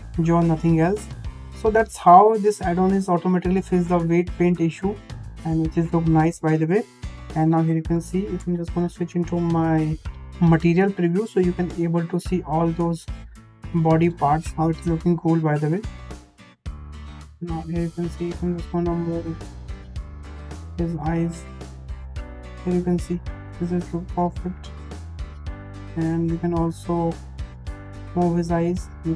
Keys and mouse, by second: 1.6-2.3 middle drag, 4.4 g, 6.9 `, 7.9 shift+middle drag, 11.4 drag, 17.4 shift+middle click, 19.3 click, 20.4-20.9 drag, 21.6 g, 26.4 g, 28.6 click.